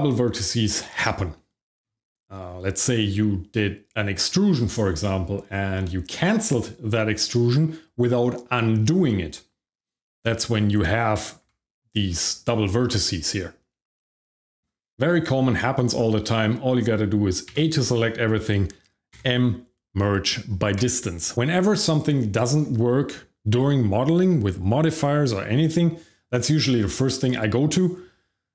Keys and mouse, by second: 10.3 click, 11.4 g, 14.5 right click, 15.2 middle click, 15.9 shift+middle click, 16.3 middle click, 17.5 a, 19.1 m.